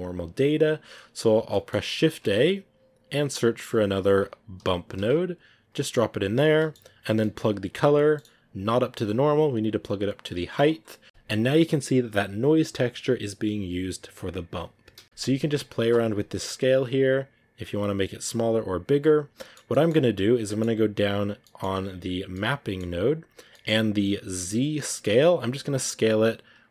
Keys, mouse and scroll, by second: 6.7 scroll up 4, 7.1 middle click, 10.5 click, 11.0 scroll down 1, 17.0-19.1 drag, 19.1 scroll down 2, 19.2 middle click, 20.1-21.8 scroll up 1, 25.2-26.7 drag.